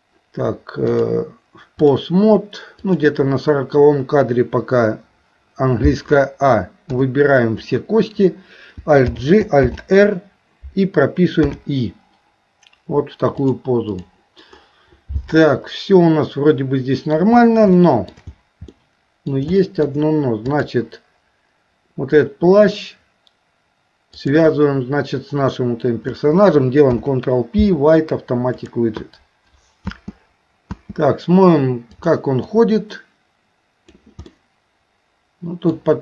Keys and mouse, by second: 1.0-2.0 drag, 2.9 click, 13.4 click, 15.5-17.2 middle drag, 17.8 shift+middle click, 18.7 middle click, 19.6 shift+middle click, 20.5 click, 24.1 shift+click, 32.0 click, 32.5-34.0 drag, 34.3-35.8 middle drag.